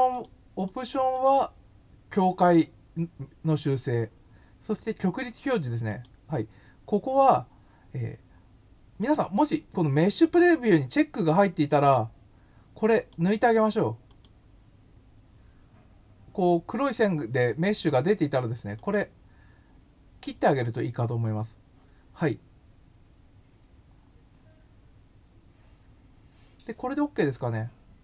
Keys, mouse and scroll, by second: 0.1 click, 0.6 click, 1.1 click, 5.8 click, 9.0 click, 12.9 click, 14.0 click, 18.7 click.